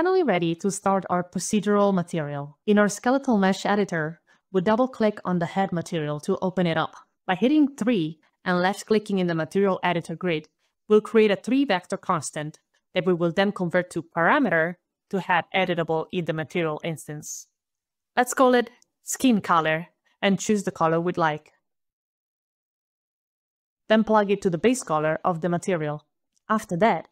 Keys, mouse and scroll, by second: 4.9 click, 5.0 click, 5.9 right click, 5.9 scroll down 1, 8.3 3, 8.8 click, 8.9 3, 10.1 click, 13.9 click, 15.6 click, 16.9-20.2 typing, 20.1 click, 20.3 click, 21.1 ctrl+v, 21.1 click, 21.2 click, 21.4 click, 21.6 click, 21.8 click, 23.1 click, 24.0 click, 26.0 click, 26.9 click.